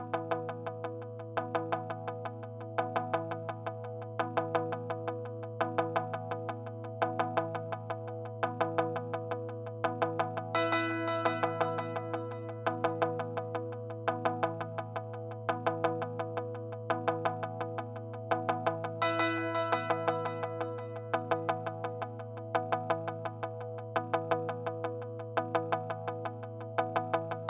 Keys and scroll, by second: 23.7 super+z, 26.6 space.